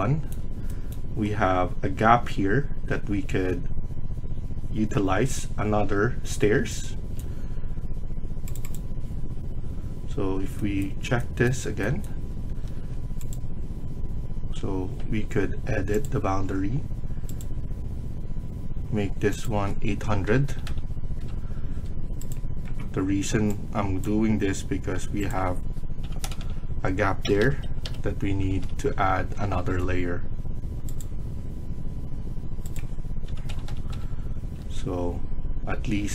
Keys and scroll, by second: 12.4 Escape, 12.6 Escape, 20.2 typing, 21.1 Return, 21.5 Escape, 25.7-28.8 typing, 29.2 Return, 29.6 Escape, 32.9-33.6 typing, 33.8 Return, 34.4 Escape.